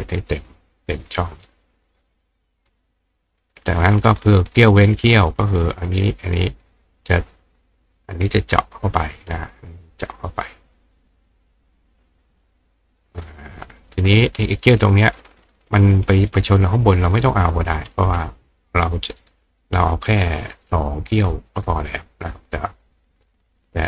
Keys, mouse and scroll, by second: 1.4-2.7 drag, 3.2 click, 5.4 click, 6.2 click, 8.4 click, 9.7 click, 10.8 click, 11.9 click, 13.2 click, 13.8 click, 17.0 click, 20.0 click, 20.3 right click, 23.2 click.